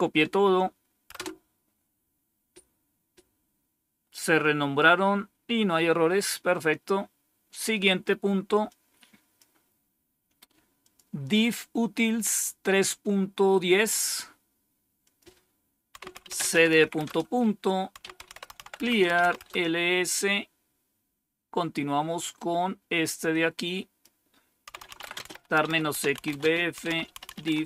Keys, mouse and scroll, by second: 1.0 Return, 8.6 click, 10.7 click, 14.9 click, 15.6-19.5 typing, 23.2 click, 24.4-27.6 typing.